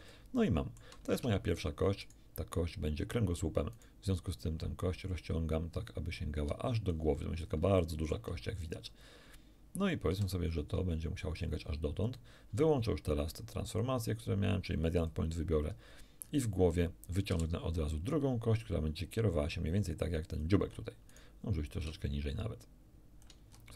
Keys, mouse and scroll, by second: 0.1 shift+middle click, 1.1 shift+Tab, 2.0 right click, 3.7 right click, 4.8-7.1 drag, 7.4 ctrl+scroll down 3, 7.8 shift+middle click, 10.1 g, 12.1 ctrl+click, 13.7 click, 15.0 click, 16.2-16.5 scroll up 1, 17.3 e, 20.3 ctrl+click, 21.1 ctrl+right click, 21.8-23.4 ctrl+shift+drag, 23.6-23.7 shift+scroll down 2.